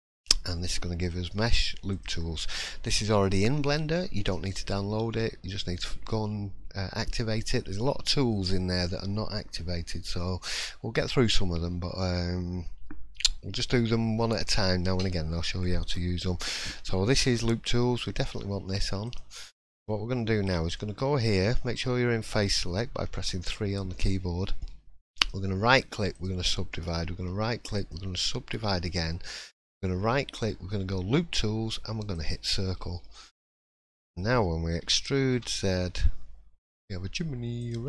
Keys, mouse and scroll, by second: 19.5 middle click, 20.4 click, 20.9 shift+middle click, 23.1 3, 23.9 shift+middle click, 24.7-25.1 scroll up 2, 25.1 right click, 26.7 right click, 28.2-28.7 scroll down 2, 29.5 right click, 32.7-33.5 scroll down 3, 33.0 middle click, 33.5 scroll up 2, 33.9 shift+middle click, 34.8 e.